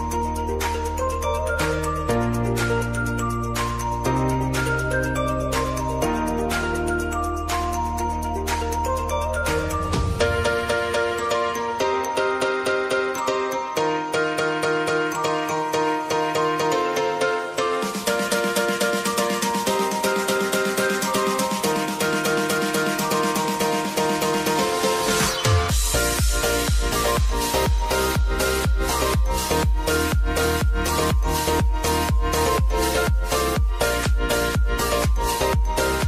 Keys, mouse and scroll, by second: 1.4-2.3 typing, 2.5 click, 3.6 Page_Down, 4.8 ctrl+a, 5.9 alt+], 13.2 right click, 14.3 click, 18.2 click, 19.1 space, 22.7 space, 23.5 scroll down 1, 24.4 scroll up 1, 25.4 click, 29.3 typing, 30.6 click, 31.9 ctrl+click, 32.3-33.0 scroll down 1, 33.2 ctrl+click, 35.8 scroll down 1.